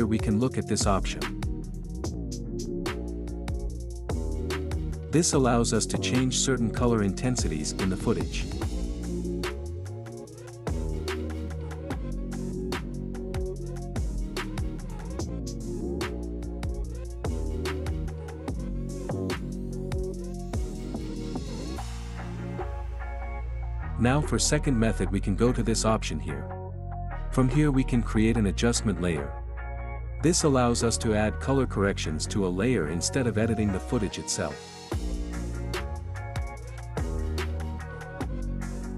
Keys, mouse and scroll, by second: 6.1 click, 12.6-16.9 drag, 16.9-17.5 scroll up 1, 19.3 scroll up 1, 19.5 ctrl+z, 21.0 click, 25.4 click, 28.8 click, 34.9 click, 37.4-38.9 drag.